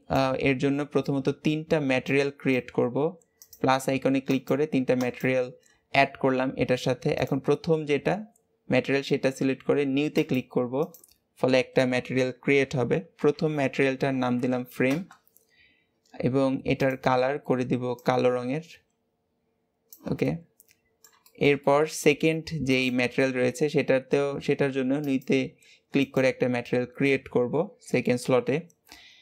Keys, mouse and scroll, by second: 2.0-7.2 drag, 10.1-14.0 drag, 16.8 click, 20.2-22.7 middle drag, 22.7 click, 25.0-29.1 drag.